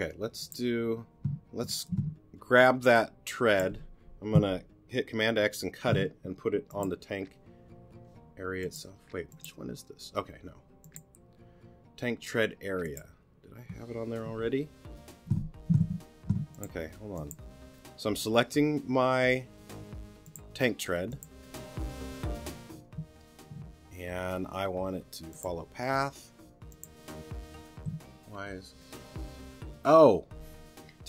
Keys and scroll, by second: 1.9 g, 5.3 super+x, 14.2 super+v, 16.2 super+t, 23.5 t.